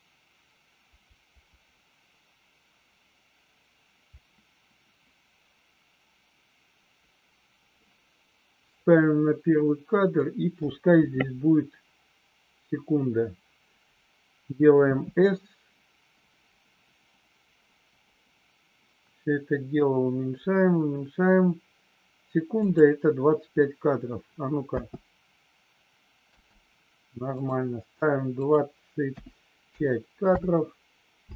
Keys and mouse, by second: 22.5 click, 24.6 space, 26.4 space, 27.3 click, 28.4 click, 31.2 space.